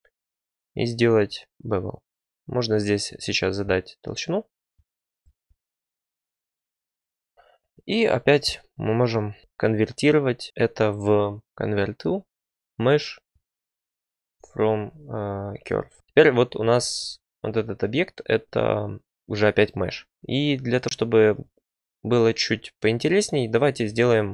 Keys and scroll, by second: 9.4 alt+c, 15.9 Tab, 16.5 Tab.